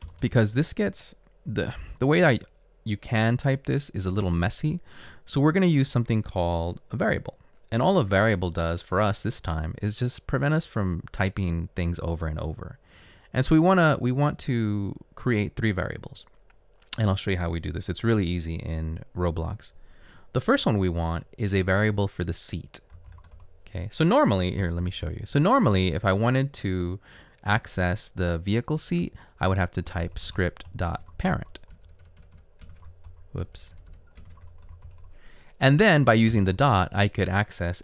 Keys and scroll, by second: 0.1 Return, 2.0 Up, 4.8 Up, 22.9-23.6 typing, 24.8 typing, 29.8-35.2 typing.